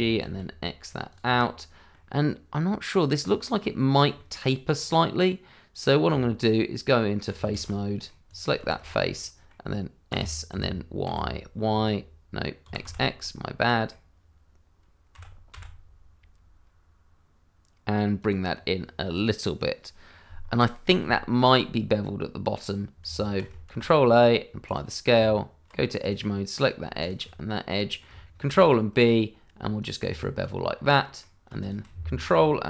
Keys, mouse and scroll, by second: 0.0 x, 1.1 click, 1.3 middle click, 3.2 scroll up 1, 3.6 middle click, 4.3 shift+middle click, 4.8 middle click, 6.0 Tab, 7.5 shift+z, 7.8 middle click, 8.2 click, 8.6 shift+z, 8.8-9.1 scroll up 1, 9.1 middle click, 10.1 s, 10.5 y, 12.6 x, 13.3 middle click, 15.1 x, 18.2 click, 18.5 scroll down 1, 20.4 scroll up 1, 21.1 shift+middle click, 21.2 middle click, 23.3 Tab, 23.6 ctrl+a, 24.6 click, 25.1 Tab, 26.0 click, 26.3 middle click, 27.0 click, 27.5 middle click, 28.5 ctrl+b, 29.8 click, 30.0 Tab, 30.4 scroll down 1, 30.7 middle click, 31.6 shift+click, 31.6 click, 32.0-32.4 scroll down 1.